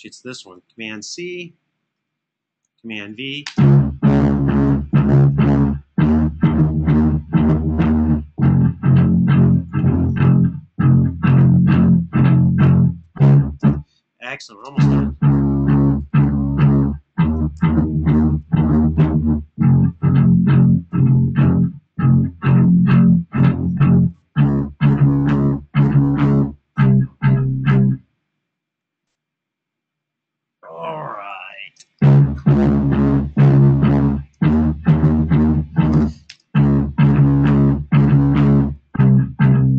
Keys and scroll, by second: 0.5 super+c, 2.7 super+v, 3.1 space, 4.5 super+], 4.7 super+], 9.1 super+[, 9.2 super+[, 13.4 space, 14.4 space, 17.3 super+d, 31.3 space, 33.4 space, 34.3 super+], 34.7 super+], 35.7 space, 36.1 space.